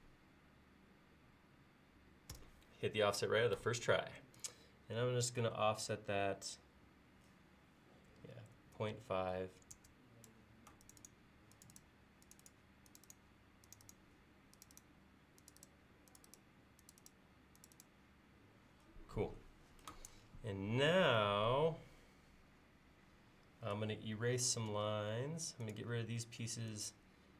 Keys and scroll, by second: 2.3 f, 8.6-9.0 typing, 24.8 e.